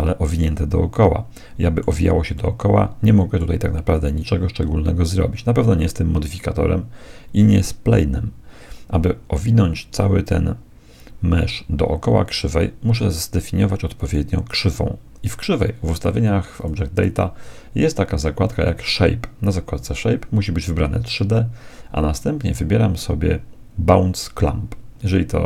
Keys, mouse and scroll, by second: 2.5-4.1 middle drag, 13.9-15.5 right drag, 15.5 click, 16.5-18.5 drag, 18.7-20.6 drag.